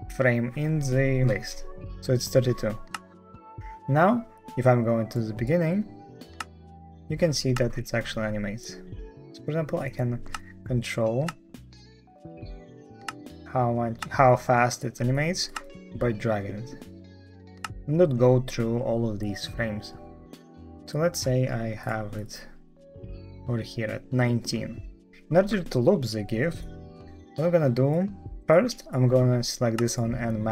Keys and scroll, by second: 6.3 space, 7.4 space, 10.2 space, 11.1 space, 12.9 space, 13.9 space, 15.4 space, 17.5 space.